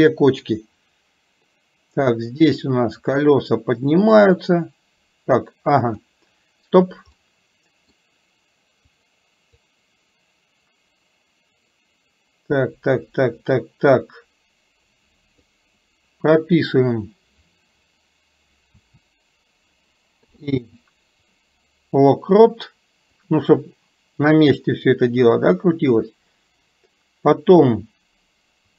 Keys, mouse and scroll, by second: 2.4 click, 2.7-6.2 drag, 7.4 middle click, 9.0 click, 9.7-15.6 drag, 23.4-28.7 drag.